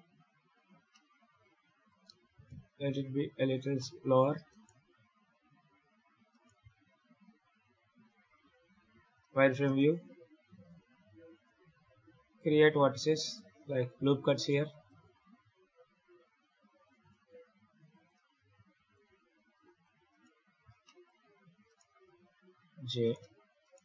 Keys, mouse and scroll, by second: 0.2 Tab, 0.8 middle click, 1.9 g, 3.7 middle click, 4.4 right click, 5.3 KP_7, 6.2 right click, 6.5 Tab, 7.2 scroll up 2, 7.6-8.2 scroll down 1, 8.2 scroll up 2, 8.8 z, 9.3 ctrl+r, 9.8 click, 10.8 ctrl+r, 11.2 click, 11.5 1, 12.0-12.6 scroll up 4, 12.9 ctrl+r, 13.5 click, 14.5 ctrl+r, 14.9 click, 15.6 ctrl+r, 16.8 click, 17.2 ctrl+r, 17.8 click, 18.2 ctrl+r, 18.7 click, 19.1 ctrl+r, 19.6 click, 20.0 right click, 20.4-20.9 scroll down 4, 20.7 shift+middle click, 21.5 shift+right click, 22.2 j, 22.9 right click, 23.5 shift+right click, 23.7 shift+r.